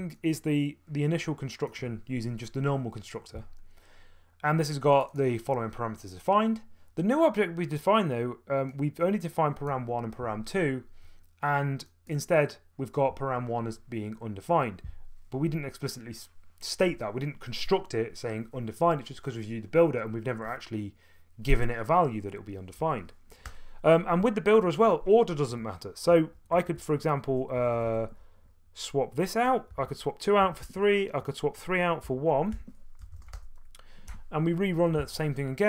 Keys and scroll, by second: 23.4 Return, 24.2-24.6 typing, 26.1-27.7 typing, 29.5-33.7 typing, 34.1 F2.